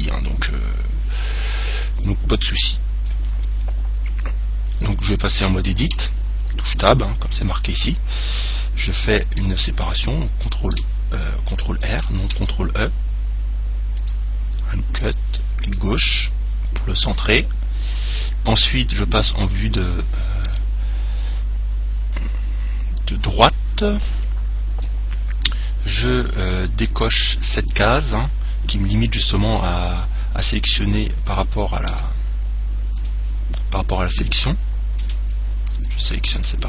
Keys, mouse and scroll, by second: 2.3 click, 3.9-6.2 middle drag, 6.2 Tab, 10.0 ctrl+e, 12.2 ctrl+r, 15.9 right click, 19.4 KP_1, 20.6 KP_3, 32.1 a, 33.2 click, 35.3 b.